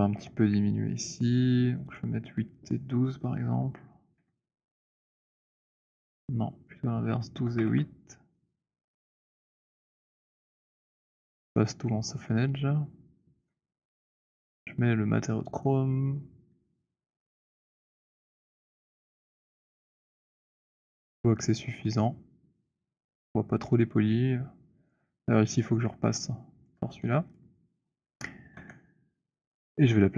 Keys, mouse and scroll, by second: 1.1 scroll, 1.8 click, 4.3 8, 5.2 click, 6.4 click, 7.3-8.7 typing, 8.5 click, 9.4 Return, 13.4 shift+right click, 17.2 right click, 18.8 alt+right click, 19.7 alt+click, 23.7 click, 24.7 alt+click, 26.7 click, 27.2 click, 28.0 scroll, 28.6 w, 29.5 scroll.